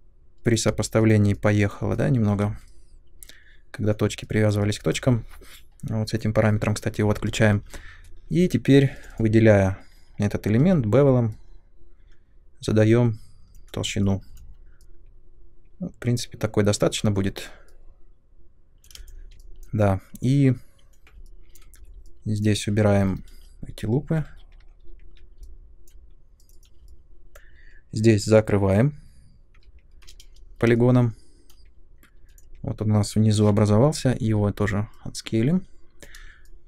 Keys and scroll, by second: 0.6 space, 8.9 3, 10.6 b, 18.9 space, 21.7 3, 23.0 Delete, 24.1 2, 24.7 ctrl+1, 24.8 ctrl+2, 29.5 p, 32.2 3, 34.2 b.